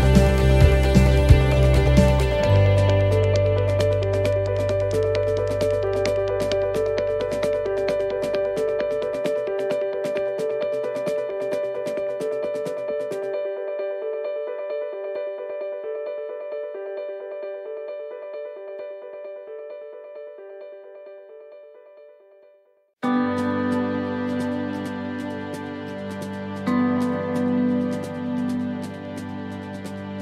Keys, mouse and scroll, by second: 1.3 middle click, 3.0 click, 5.3 shift+middle click, 5.7 scroll up 4, 6.9 click, 9.9 click, 12.2-12.5 scroll down 2, 14.1-14.5 scroll down 2, 15.0 shift+middle click, 15.6 middle click, 16.8-17.2 scroll up 1, 20.3 scroll down 2, 21.0 middle click, 21.4 scroll up 4, 22.0 shift+middle click, 23.4 click, 25.3 right click, 26.8 l, 27.0 l, 28.2 l, 28.3 l, 29.4 l, 29.5 l.